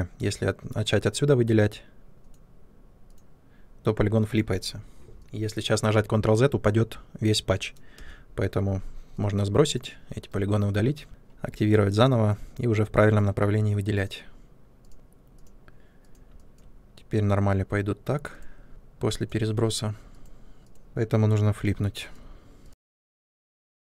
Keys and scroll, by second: 7.9 space, 10.1 Delete.